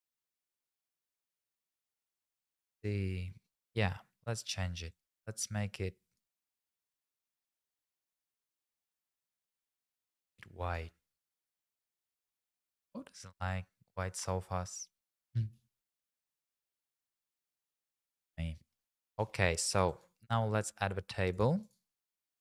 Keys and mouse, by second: 0.5 middle click, 4.9 click, 5.6 click, 11.7 middle click, 12.1 click, 16.8 middle click, 17.8 middle click, 19.3 middle click, 21.6-22.4 drag.